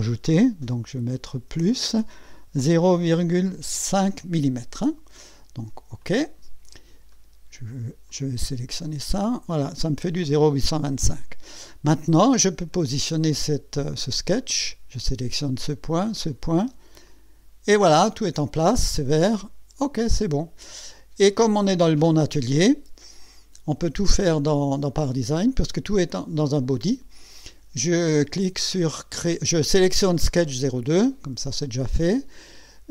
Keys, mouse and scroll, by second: 1.5 KP_Add, 2.6 KP_0, 3.1 KP_Decimal, 3.9 KP_5, 6.0 click, 7.1 right click, 8.1 click, 8.8-9.9 drag, 12.1-12.5 scroll down 1, 12.7-13.2 right drag, 14.4 click, 16.1 click, 17.1 click, 17.9-18.2 scroll down 1, 19.8 click.